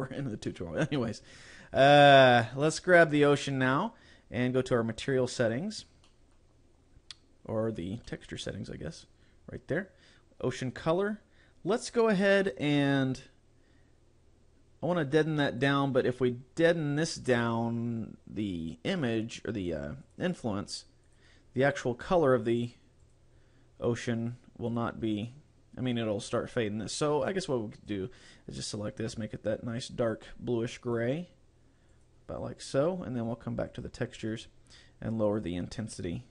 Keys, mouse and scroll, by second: 2.7 right click, 5.1 click, 5.5 click, 6.1 middle click, 8.1 middle click, 15.7 click, 20.1 click, 20.4 scroll down 3, 21.1 click, 21.4-21.9 scroll down 2, 23.1 click, 24.7 click, 27.8 click, 33.7 click, 35.1 click.